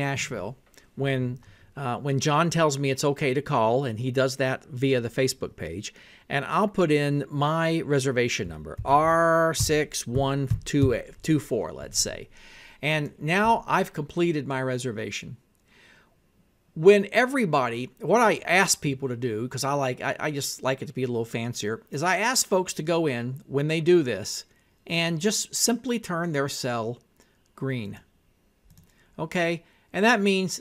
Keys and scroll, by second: 8.8-11.4 typing.